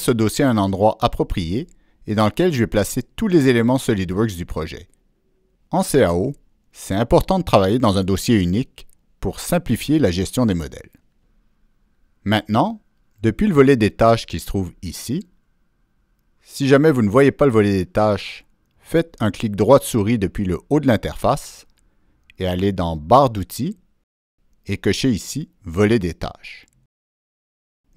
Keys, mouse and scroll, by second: 10.5 click, 12.3 click, 18.8 right click, 21.4 right click, 21.8 click, 23.3 click, 25.0 click, 26.2 click, 27.6 click.